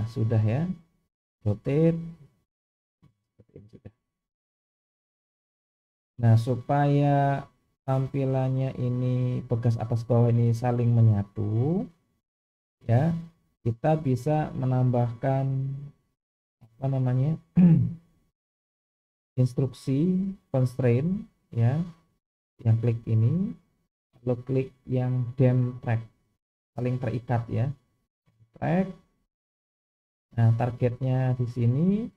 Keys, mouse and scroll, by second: 1.1 click, 1.5 r, 16.5 click, 19.1 click, 24.1-28.7 drag.